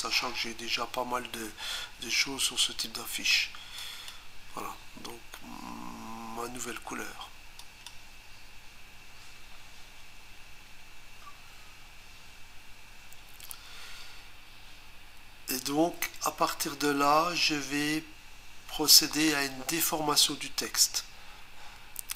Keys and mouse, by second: 3.8 click, 7.6 click.